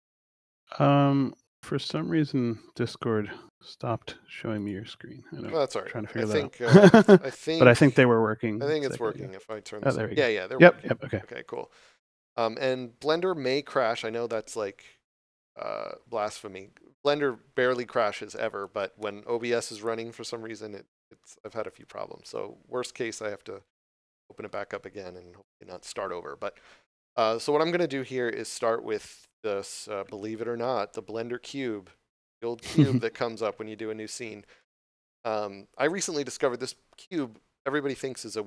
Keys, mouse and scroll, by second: 4.1 shift+middle click, 8.4 click, 9.4 middle click, 11.3 click, 12.1 middle click, 20.5 scroll up 1, 21.1 middle click, 23.8 shift+middle click, 34.5 middle click.